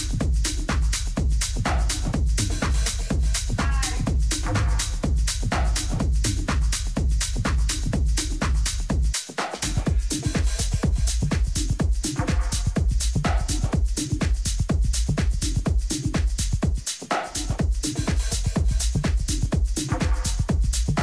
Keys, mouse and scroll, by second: 0.7-5.8 drag, 4.6 middle click, 5.1 a, 5.8-11.5 middle drag.